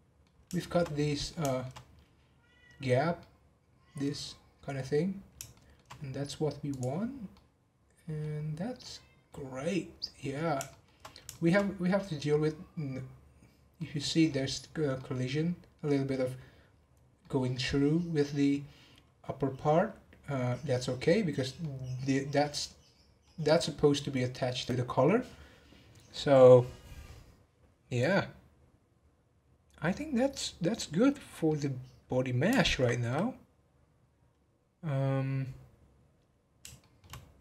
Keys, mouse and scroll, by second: 0.3 scroll down 1, 0.5 shift+middle drag, 0.8 scroll up 3, 1.0-5.1 middle drag, 5.1-5.5 scroll down 2, 5.5-6.7 shift+middle drag, 6.7 click, 7.1 scroll down 3, 7.3-8.3 middle drag, 8.3-8.6 scroll down 1, 8.8-10.2 middle drag, 10.2-10.6 scroll up 2, 10.6 shift+middle click, 11.0-11.6 scroll up 2, 11.3 shift+middle drag, 11.8-12.7 middle drag, 12.7-13.7 scroll down 2, 13.7-20.4 middle drag, 21.6-24.0 middle drag, 24.0-26.6 scroll down 1, 26.6-27.1 scroll down 1, 30.9 scroll down 4, 31.5-34.6 middle drag, 36.8-37.2 shift+middle drag, 37.2 scroll up 4.